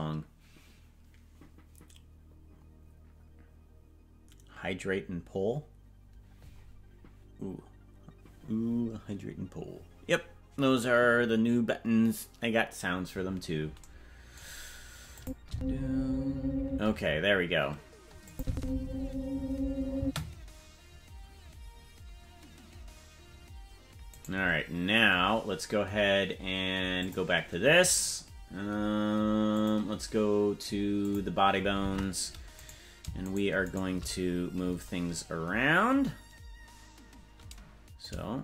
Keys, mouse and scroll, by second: 15.2 click, 15.5 space, 16.7 space, 18.3 click, 18.5 space, 20.1 space, 24.3 right click, 27.0 click, 29.5 click, 31.0 click, 31.8 ctrl+Tab, 32.6 right click, 33.3 shift+right click, 36.2-36.7 scroll down 2, 38.0-38.4 shift+drag.